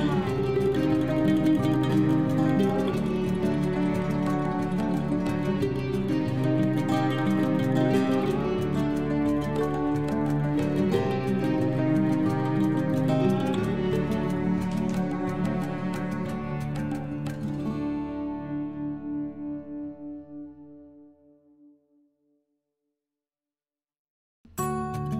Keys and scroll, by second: 1.7 ctrl+g, 4.2 ctrl+z.